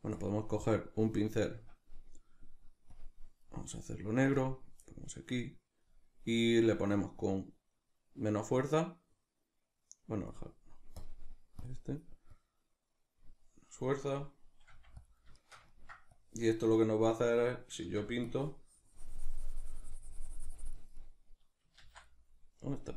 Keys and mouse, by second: 8.6-15.1 drag, 14.7 f, 15.4 shift+middle click, 16.2-21.0 drag, 17.9 ctrl+z, 21.0-22.9 middle drag, 21.8 ctrl+z.